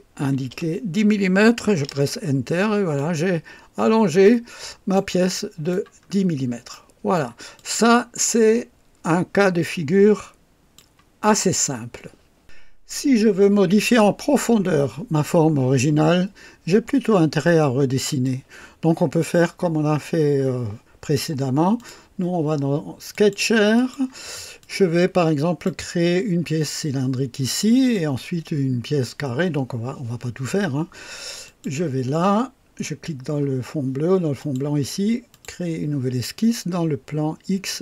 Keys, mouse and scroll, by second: 0.2 KP_1, 0.5 KP_0, 1.8 KP_Enter, 2.0 typing, 3.0-5.1 drag, 3.3-5.3 typing, 5.3 right click, 6.1-6.4 scroll down 2, 6.7-7.3 right drag, 7.6 click, 9.1-10.9 drag, 13.0 scroll up 2, 13.4-13.7 scroll down 2, 18.2-19.4 drag, 21.7 click, 23.1 click, 23.7 click, 24.6-25.8 drag, 27.6 click, 31.4 click, 34.4 click, 35.3 click.